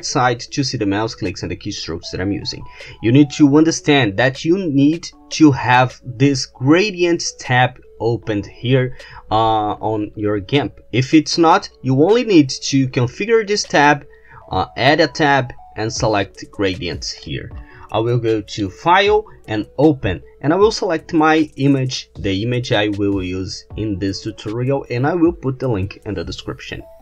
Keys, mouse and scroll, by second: 13.7 click, 17.2 click, 18.6 click, 19.6 click.